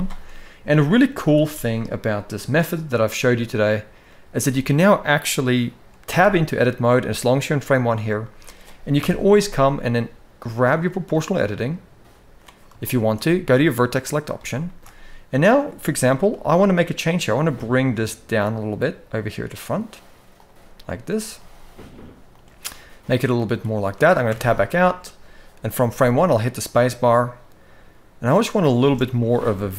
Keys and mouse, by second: 0.5 middle click, 1.0 ctrl+s, 1.1 ctrl+s, 1.8 click, 2.5 click, 2.9-3.8 middle drag, 4.2-4.6 shift+middle drag, 5.1 middle click, 5.9 Tab, 7.2 middle click, 7.9 shift+middle click, 8.7 KP_1, 12.5 shift+middle click, 13.6 click, 14.4 shift+middle click, 16.0 g, 21.1 g, 24.1 Tab, 25.6 space, 29.1 middle click, 29.5-29.7 middle drag.